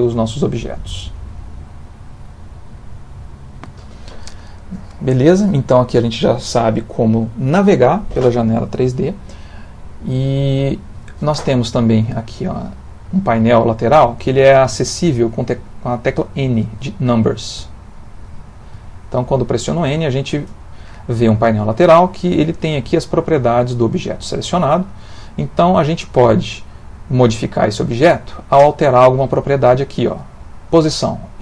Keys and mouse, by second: 1.6 middle click, 17.5-20.0 typing, 23.6 click, 26.4 middle click.